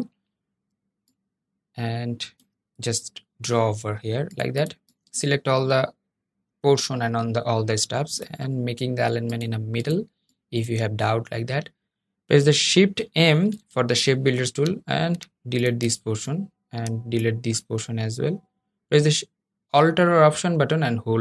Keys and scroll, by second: 13.0 shift+m.